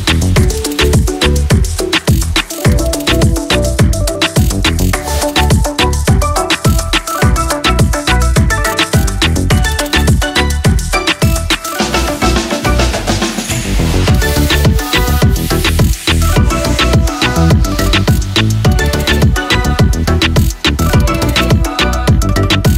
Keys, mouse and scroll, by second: 3.9 typing, 22.2-22.6 typing, 22.6 click.